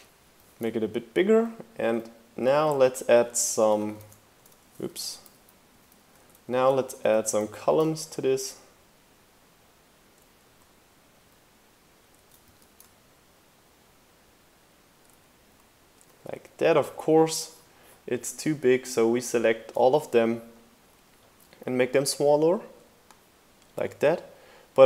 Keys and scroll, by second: 0.3 super+c, 0.4 super+v, 0.7 shift+Right, 2.5 shift+Right, 3.8 super+x, 3.9 super+c, 4.8 super+z, 7.2 shift+Left, 7.5 super+c, 7.7 super+v, 7.9 shift+Right, 10.4 shift+Left, 12.4 super+c, 12.7 super+v, 12.9 shift+Right, 15.4 shift+Left.